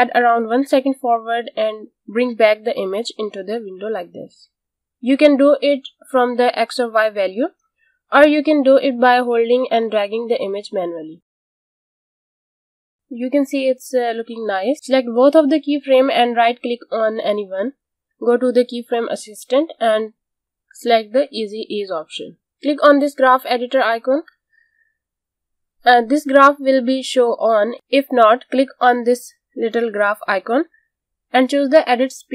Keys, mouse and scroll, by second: 3.7 click, 12.0 click, 12.4 space, 15.6 space, 16.4 click, 17.9 right click, 22.0 click, 30.6 click.